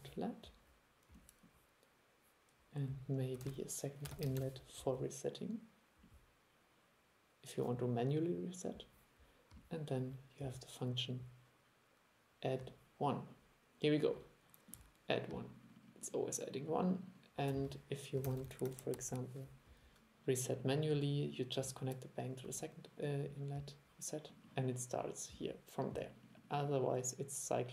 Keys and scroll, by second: 3.5 super+1, 18.3 super+c, 18.5 super+v.